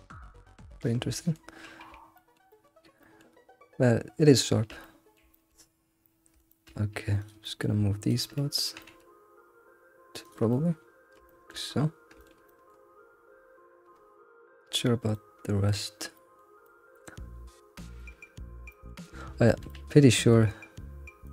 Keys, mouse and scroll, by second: 0.5 middle click, 1.5 scroll down 2, 2.1-5.7 shift+middle drag, 5.7-6.0 scroll up 2, 6.0 middle click, 6.8-7.2 scroll up 1, 7.2 click, 7.4 middle click, 8.1 ctrl+click, 8.3 middle click, 8.7 g, 10.5 middle click, 11.1 shift+middle click, 11.6 scroll, 11.7-12.2 scroll up 3, 12.2 alt+middle click, 12.5 middle click, 12.9-15.0 scroll down 16, 15.1-18.1 shift+middle drag, 18.1-18.7 scroll up 4, 18.7 shift+middle click, 19.0 scroll, 19.3 scroll up 1, 19.5-20.6 shift+middle drag, 20.6-21.1 scroll up 1, 21.2 shift+click.